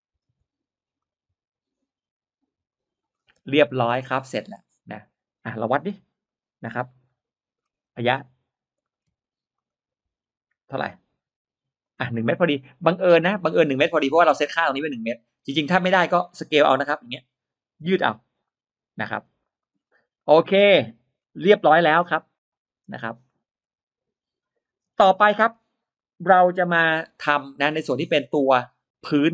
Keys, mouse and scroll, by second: 0.9 click, 2.6 click, 3.0-5.0 scroll down 5, 3.2 middle click, 3.3 space, 3.4 click, 4.0 middle click, 4.4 middle click, 5.0 scroll up 1, 6.0-7.4 scroll up 3, 6.8 middle click, 7.4-7.8 scroll down 1, 7.8 r, 8.7 middle click, 8.7 scroll up 1, 9.0 t, 9.4 click, 11.9 middle click, 11.9 space, 12.9 scroll up 1, 13.4 click, 14.0 middle click, 14.0-14.4 scroll up 1, 15.6-15.9 scroll down 1, 16.6 shift+click, 17.7 s, 18.3 click, 19.0 middle click, 19.0 space, 19.3 click, 19.6-19.9 scroll down 1, 20.0 middle click, 20.6-21.0 scroll down 1, 21.9 middle click, 23.1 scroll up 1, 23.2 middle click, 25.0 middle click, 25.3-25.6 scroll down 1, 25.8 middle click, 26.2 scroll down 1, 26.8 middle click, 27.2-27.6 scroll down 1, 27.8 scroll up 1, 29.2 middle click, 29.2-29.3 scroll up 2.